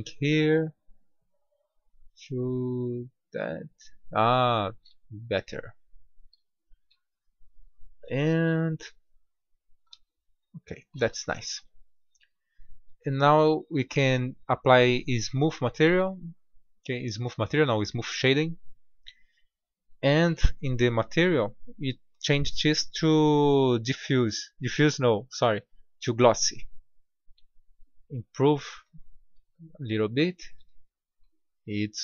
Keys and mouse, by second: 5.3-7.1 middle drag, 11.3 Tab, 12.6 Tab, 31.3-32.0 middle drag.